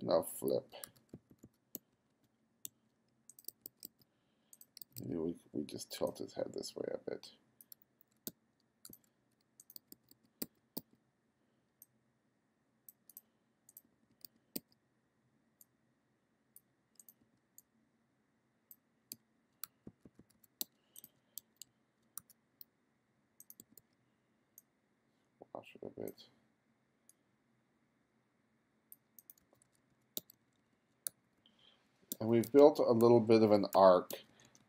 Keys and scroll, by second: 0.0-1.8 typing, 3.6 b, 4.4 b, 5.5 b, 7.8 f, 8.3 g, 9.0 f, 9.8 b, 13.9 b, 15.1 b, 17.2 b, 17.7 b, 19.2 g, 19.7 f, 20.6 g, 22.2 f, 22.7 f, 23.6 b, 29.5 f, 30.2 g, 31.1 f, 32.2 g, 33.1 f, 34.2 g.